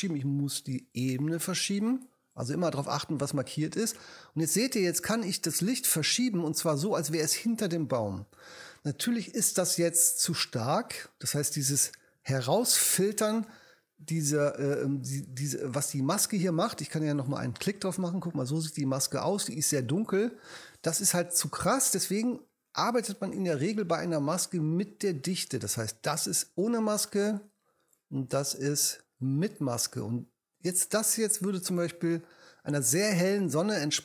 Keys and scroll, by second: 12.1 h.